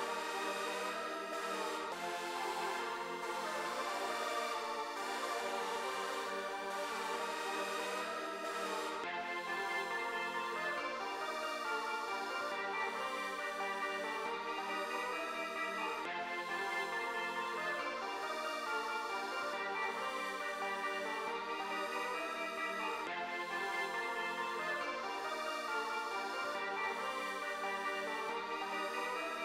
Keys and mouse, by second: 0.0 click, 0.2 click, 0.4 click, 0.6 click, 3.0 click, 3.8 click, 6.1-10.3 drag, 11.2 click, 16.4-18.9 drag, 24.3-29.4 drag.